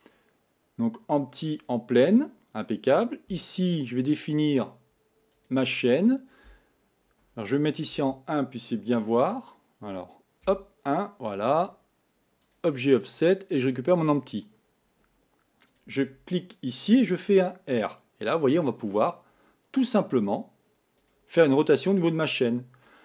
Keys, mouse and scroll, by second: 5.5 click, 8.0 KP_1, 10.5 KP_1, 12.5 click, 13.2-15.8 drag, 17.4 r, 21.5-22.3 scroll up 5, 22.3-22.9 scroll down 3, 22.9-23.0 middle drag.